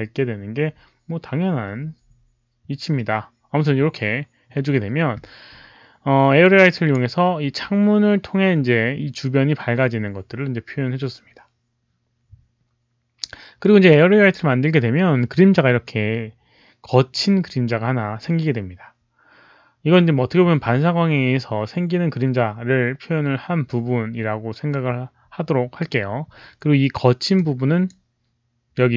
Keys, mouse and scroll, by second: 6.3 click, 13.2 click, 13.8 click, 27.3 click.